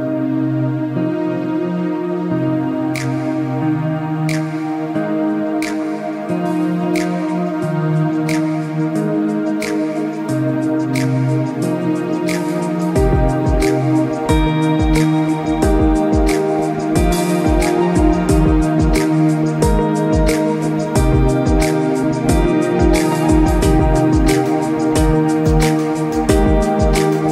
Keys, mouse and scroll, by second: 1.1 scroll down 1, 1.5 alt+Num_Lock, 1.5 alt+scroll up 2, 1.7 click, 4.8 click, 7.0 scroll down 1, 7.1 scroll up 1, 7.4 click, 9.4 click, 10.5-11.0 scroll down 3, 11.5 click, 12.0 click, 13.3 click, 13.8 scroll down 1, 14.1 space, 14.3 click, 14.6 alt+scroll up 1, 15.3 click, 15.9 scroll up 1, 16.1 click, 17.2 scroll up 1, 17.9 z, 18.0 scroll up 1, 18.2 click, 21.4 scroll down 1, 21.5 space, 21.8 click, 22.1 scroll up 1, 22.4 scroll down 1, 22.7 click, 22.9 alt+scroll up 2, 23.1 z, 23.4 click, 24.2 scroll up 1, 24.3 scroll, 24.4 alt+scroll down 1, 25.2 click, 25.5 z, 25.6 click, 26.3 scroll up 1, 26.9 click.